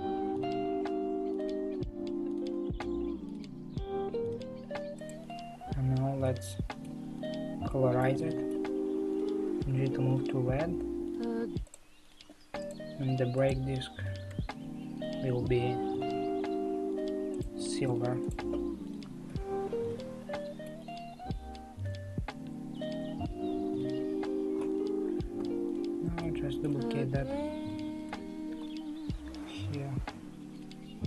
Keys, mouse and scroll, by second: 0.7-2.1 middle drag, 2.1-2.6 scroll down 6, 5.0 click, 6.2-7.0 middle drag, 7.0 scroll up 5, 7.7-9.7 shift+middle drag, 12.7 click, 13.5 click, 17.9 click, 18.3 click, 18.8 scroll down 3, 19.4-24.0 middle drag, 24.0 l, 25.4 KP_3, 25.6 middle click, 26.3 shift+middle click, 26.9 middle click, 26.9 scroll up 2, 26.9 scroll down 1, 27.0 scroll up 2, 28.0 shift+d.